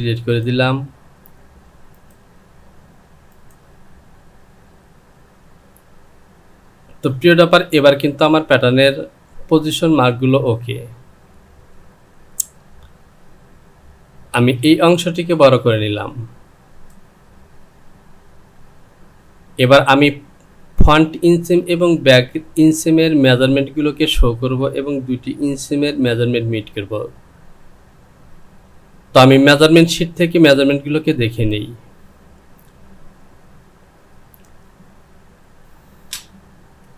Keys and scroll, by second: 0.2 Delete, 14.4 Return.